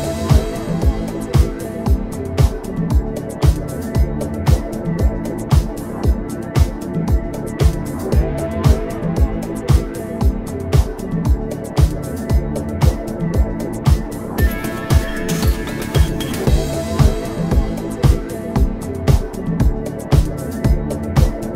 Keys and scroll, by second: 2.6 space, 10.0 a, 14.2 p.